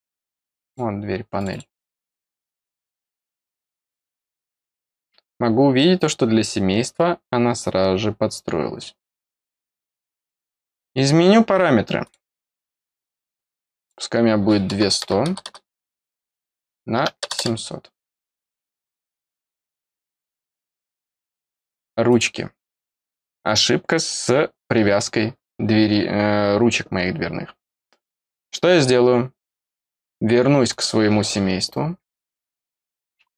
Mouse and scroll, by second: 0.6 click, 1.3 click, 1.4 click, 2.5 click, 4.0 click, 5.7-9.3 middle drag, 10.3 click, 12.0 click, 13.7 click, 16.0 click, 18.2 click, 19.7 click, 20.9 middle click, 22.0 click, 30.6 click, 32.9-33.3 scroll up 1.